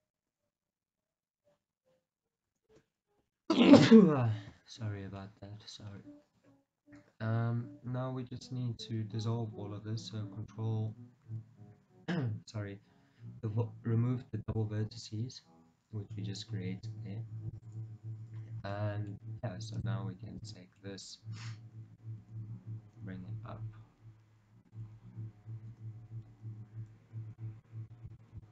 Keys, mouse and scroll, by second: 3.5 Return, 4.8-5.3 scroll up 2, 5.3 shift+middle click, 5.7 scroll up 2, 8.1 a, 11.4 ctrl+v, 17.7 click, 18.4-18.8 scroll down 1, 18.8 middle click, 19.9 shift+click, 20.9-24.8 middle drag, 21.8 g, 24.8 click, 25.0 scroll down 1, 25.8 KP_1.